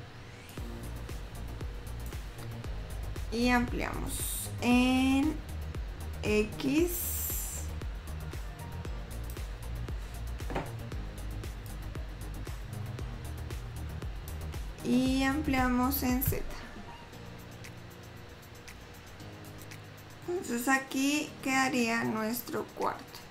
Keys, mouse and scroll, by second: 0.8 click, 3.8 s, 11.9 click, 19.6 middle click, 19.6 scroll down 2, 20.5 middle click, 22.0-22.6 scroll up 1.